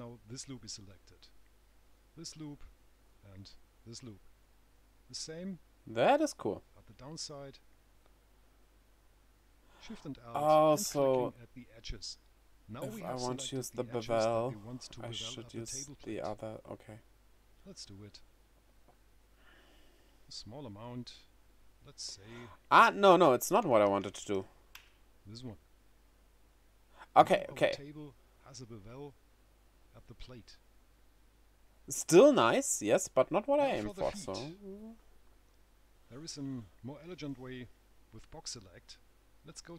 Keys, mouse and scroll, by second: 4.7 right click, 6.5 alt+shift+click, 11.9 right click, 18.7 click, 22.7 click, 24.4 KP_0, 27.1-27.5 scroll up 1, 27.8 middle click, 28.3 right click, 30.9 right click.